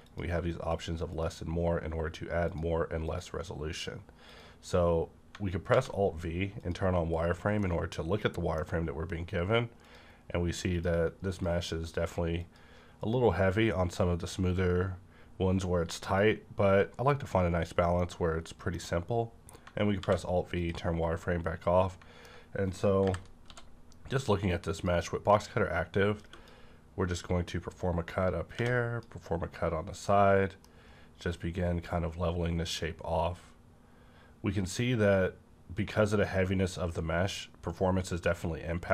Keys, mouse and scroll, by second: 0.0 click, 5.7 alt+v, 6.6 click, 7.2-7.6 scroll up 1, 7.6-10.7 middle drag, 9.7 click, 10.7 click, 15.9 click, 16.0 click, 17.6-18.3 scroll down 2, 17.9 middle click, 18.0-20.6 middle drag, 19.9 alt+v, 20.6 click, 20.9 scroll down 1, 21.2-23.4 middle drag, 22.9 KP_5, 23.4 d, 24.7 click, 25.4-27.5 drag, 27.5-30.1 drag, 30.1-35.0 middle drag, 31.2-35.0 drag.